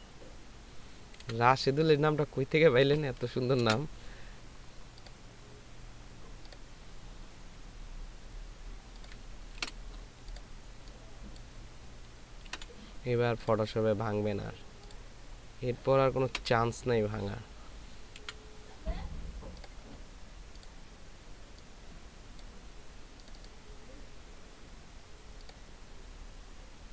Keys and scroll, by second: 3.6 ctrl+c, 9.6 ctrl+v, 12.5 ctrl+c, 16.3 ctrl+v, 18.2 BackSpace.